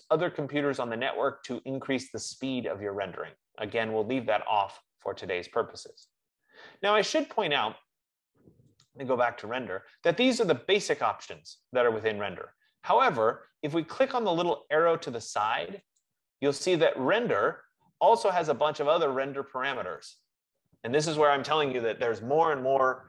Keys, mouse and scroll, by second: 6.3-11.3 drag, 14.1 click, 16.2-21.2 drag.